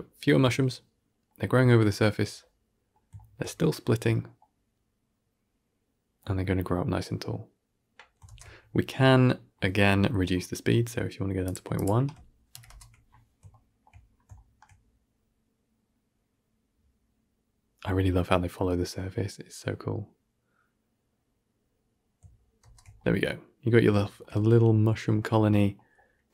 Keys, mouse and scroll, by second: 8.2 shift+space, 11.3-12.4 drag, 12.4 shift+Left, 12.5 shift+space, 13.4-13.8 shift+middle drag, 13.8-14.2 scroll up 3, 14.2-17.3 shift+middle drag, 22.5 shift+space, 22.9-23.9 middle drag, 24.3-24.7 middle drag, 25.0 middle click, 25.4 middle click, 26.1 middle click.